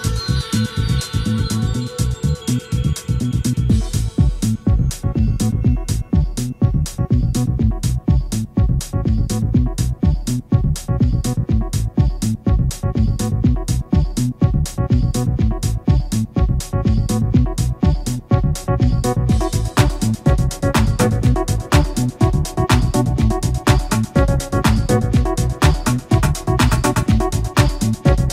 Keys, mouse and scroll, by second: 1.0 click, 1.4 click, 2.5 click, 3.3 scroll down 1, 3.6 middle click, 4.9-7.0 drag, 10.6 click, 11.8 F12, 15.1 click, 16.1 F12, 19.0 F11, 20.6-21.2 shift+middle drag, 21.6 shift+middle click, 22.4-24.3 shift+drag, 25.6 shift+a, 27.0 shift+click, 28.2 shift+click.